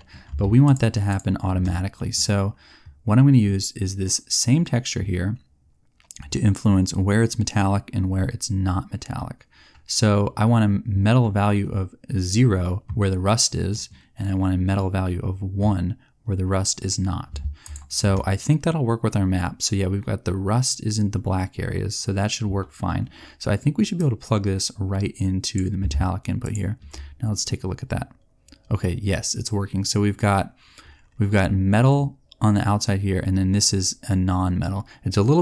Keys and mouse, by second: 0.6 click, 23.9-25.5 drag, 33.9 middle click.